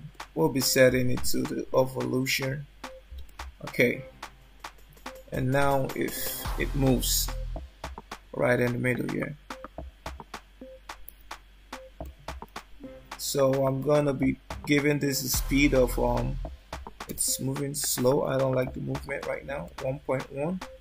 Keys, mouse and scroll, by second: 0.2 click, 2.0 click, 3.4 shift+middle click, 10.1 click, 14.1 shift+middle click, 15.7 click.